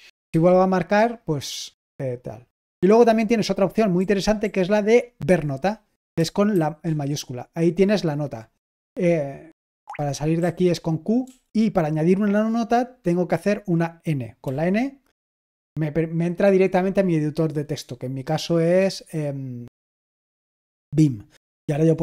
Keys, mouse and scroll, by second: 0.3 typing, 4.4 typing, 8.7 Escape, 9.8-11.2 typing, 21.5 typing.